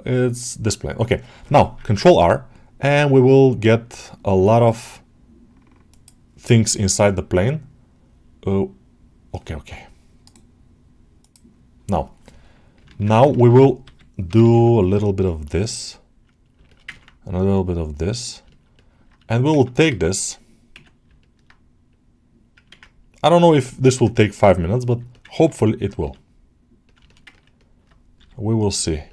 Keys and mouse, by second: 10.1 right click, 13.2 ctrl+alt+middle click, 15.1-16.4 middle drag, 16.6 shift+middle click, 16.8 ctrl+alt+middle click, 17.2 middle click, 18.4 shift+middle click, 18.6 alt+middle click, 21.0 middle click, 22.6 ctrl+z, 22.9 click, 24.7 click, 25.0 alt+middle click, 25.2 ctrl+alt+middle click, 25.4 middle click, 26.9 alt+shift+middle click, 27.2 ctrl+alt+middle click, 27.5 alt+middle click.